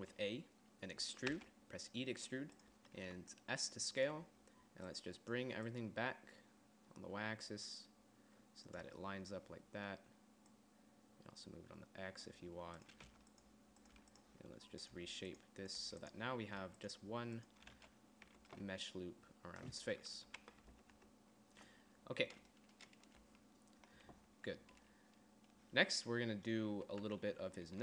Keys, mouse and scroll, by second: 0.2 a, 1.9 e, 3.4 click, 3.6 s, 11.0-12.8 drag, 13.3 middle click, 13.6-17.1 typing, 18.3 z, 18.8 Tab, 20.8 KP_3, 21.1 Tab, 21.5 Tab, 27.6 Tab.